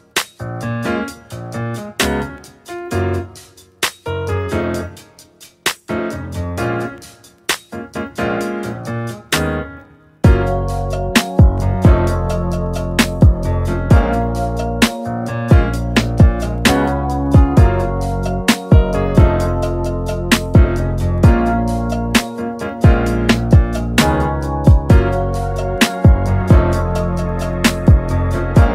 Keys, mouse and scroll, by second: 2.4 KP_Divide, 2.7-6.6 middle drag, 6.6-9.2 drag, 9.8 n, 10.0-10.8 scroll up 5, 10.8-12.3 drag, 12.3-14.2 middle drag, 14.2-18.1 drag, 18.5-22.7 middle drag, 22.7 click, 23.6-25.2 middle drag, 25.2 click, 26.2-28.7 drag.